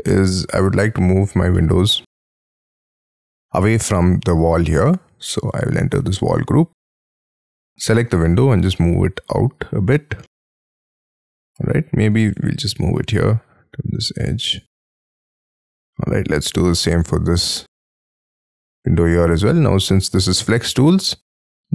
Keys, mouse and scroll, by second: 0.2 middle click, 1.5 middle click, 2.2 middle click, 4.7 middle click, 5.5 double click, 7.9 m, 9.3 shift+click, 10.3 middle click, 14.5 shift+click, 15.4-15.9 scroll down 6, 16.3 Escape, 16.6 double click, 17.0 double click, 17.5 double click, 17.9-18.4 scroll up 12, 18.1 m, 20.6-20.9 shift+scroll down 5.